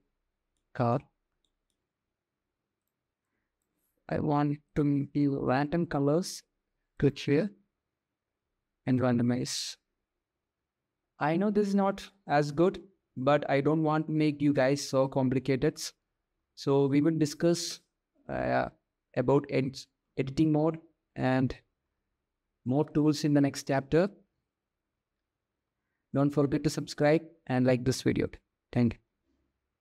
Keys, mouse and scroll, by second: 1.0 shift+middle click, 2.9 click, 4.3 click, 6.6-8.8 drag, 9.2 click, 16.0 Tab, 17.8-21.5 middle drag, 22.0 middle click, 24.4-25.6 middle drag, 26.1-28.3 middle drag, 28.7-29.8 middle drag.